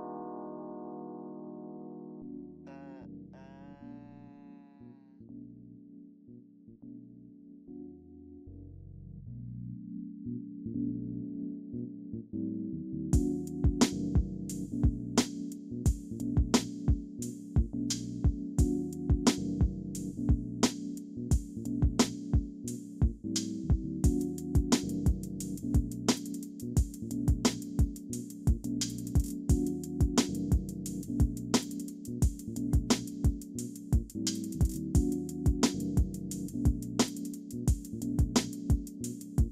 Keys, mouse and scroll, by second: 1.8 double click, 2.7 alt+middle click, 5.0 scroll up 1, 7.8 scroll down 1, 8.9 alt+middle click, 9.2 alt+scroll up 1, 10.6 alt+middle click, 12.4 double click, 14.0 scroll up 1, 18.0 scroll down 1, 18.6 alt+middle click, 19.2 scroll down 1, 19.7 middle click, 20.3 alt+click, 21.9 middle click, 23.1 scroll up 1, 25.6 alt+middle click, 26.1 alt+scroll up 1, 30.1 scroll up 1, 30.2 middle click, 30.8 alt+click, 31.6 scroll up 1, 32.0 alt+middle click, 32.3 alt+click, 34.4 scroll up 1, 35.2 alt+click, 36.7 scroll down 1, 37.8 alt+click, 39.3 alt+middle click.